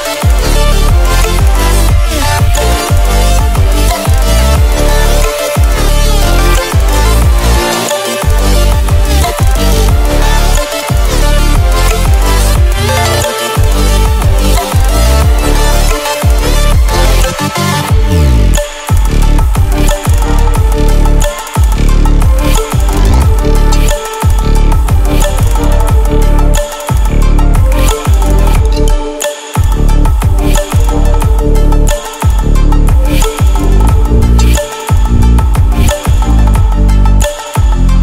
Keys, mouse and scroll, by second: 3.9-4.6 ctrl+alt+scroll down 2, 4.6-5.1 ctrl+alt+scroll up 2, 5.1 ctrl+space, 5.2 click, 5.6-6.8 space, 9.3 click, 11.1-12.3 alt+shift+click, 13.5 click, 25.0-31.9 drag, 25.2-26.0 typing, 29.2-29.9 typing, 31.7-32.4 typing, 34.4 ctrl+w, 34.5 typing, 35.9 ctrl+w, 36.7 click.